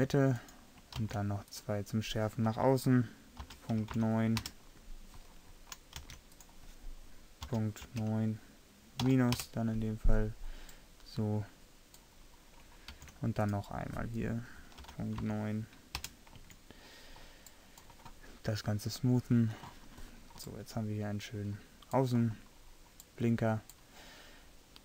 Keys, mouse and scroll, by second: 1.1 ctrl+r, 4.4 middle click, 6.1 ctrl+r, 13.0 ctrl+r, 16.5 Tab, 20.9 middle click, 21.6 scroll up 1.